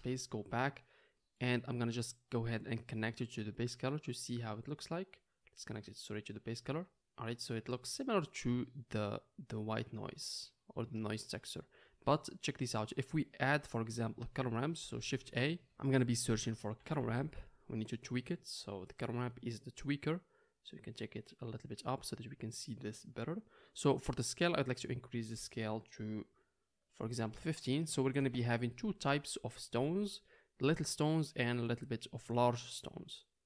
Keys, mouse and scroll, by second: 1.9-3.7 middle drag, 3.7 drag, 7.6-9.9 middle drag, 15.0 shift+a, 15.7-18.1 drag, 15.7-18.1 middle drag, 15.7-18.1 right drag, 18.4-21.3 drag, 20.6 middle click, 20.6 right click, 21.8 click, 21.8 middle click, 21.8 right click, 21.9-22.9 middle drag, 22.2 click, 22.2 right click.